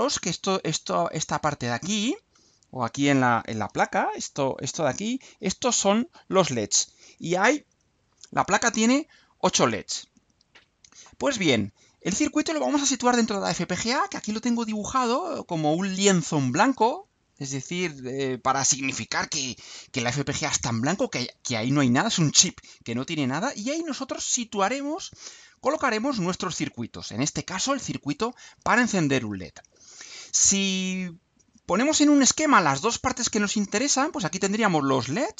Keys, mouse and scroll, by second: 10.1 click, 31.1 click.